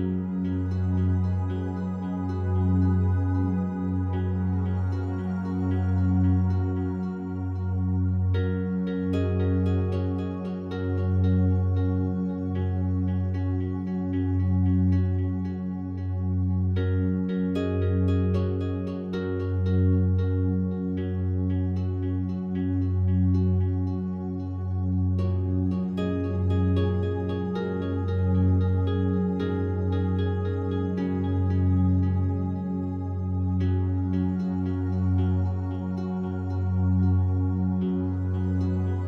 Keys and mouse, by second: 0.5-5.7 ctrl+alt+drag, 6.7 ctrl+z, 7.3 ctrl+z, 9.2 click, 12.7 click, 13.4 alt+click, 14.4 1, 15.2 ctrl+alt+click, 17.0 click, 17.5 click, 18.4 click, 19.0 alt+shift+click, 19.9 alt+shift+click, 21.1 alt+a, 22.3 b, 22.7-24.7 drag, 25.7 b, 25.8-27.9 drag, 28.8 Delete, 29.4 click, 30.0 click, 30.8 ctrl+z, 31.8 Delete, 32.5 click, 33.9 click, 37.4 click, 38.6 click.